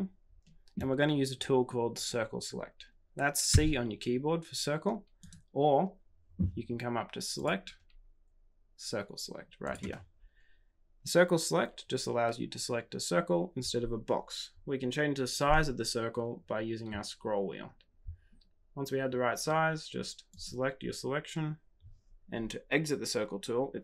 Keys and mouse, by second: 3.4 c, 7.5-23.8 drag.